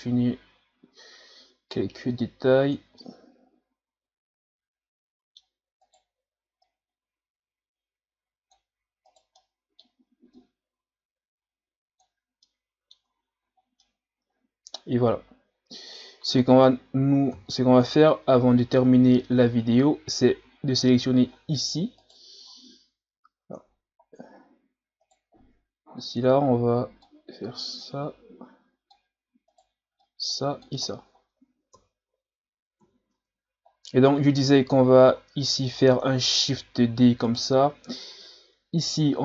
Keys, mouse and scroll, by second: 3.0-5.9 middle drag, 5.9 right click, 6.7-9.1 drag, 9.1 right click, 9.4 middle click, 10.4-12.4 drag, 12.4 middle click, 13.0 Tab, 13.4 a, 13.6 scroll down 3, 13.8-16.8 middle drag, 17.3 KP_1, 18.2-18.6 scroll down 2, 18.6-19.9 scroll up 2, 19.9-21.3 scroll up 1, 21.3-22.0 scroll up 3, 22.0 right click, 22.4-23.4 scroll up 4, 23.4 Tab, 24.4 scroll up 5, 25.0 right click, 26.0-29.5 drag, 29.5 right click, 30.0 click, 30.9 scroll down 3, 31.7 KP_3, 32.8 KP_1, 33.1 Tab, 33.7-34.7 scroll down 5, 34.7-36.0 scroll down 2, 36.0-36.4 scroll down 1, 36.4 shift+d, 38.8-39.2 drag.